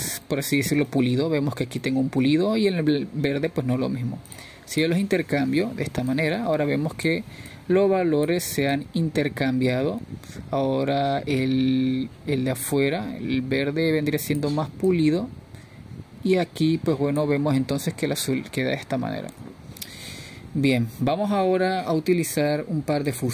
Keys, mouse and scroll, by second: 1.5-2.0 middle drag, 2.0-2.4 scroll down 1, 2.4-3.1 middle drag, 3.1-3.6 scroll up 2, 3.6-4.4 middle drag, 4.4-5.0 scroll down 1, 5.0-8.1 middle drag, 8.1-15.0 drag, 18.4-20.9 drag, 20.9-21.2 scroll down 2, 21.2-23.3 middle drag.